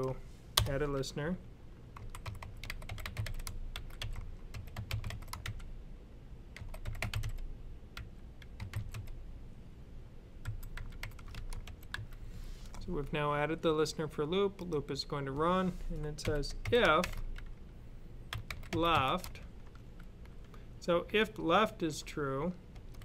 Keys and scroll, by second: 1.8-5.3 typing, 6.4-8.8 typing, 10.3-11.8 typing, 15.8-16.8 typing, 18.1-19.5 typing.